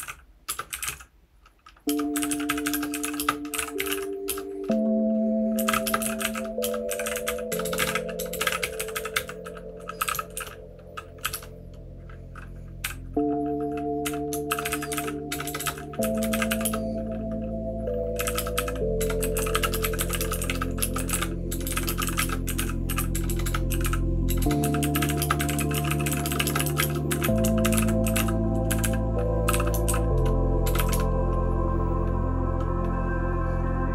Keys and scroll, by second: 0.0-31.4 typing.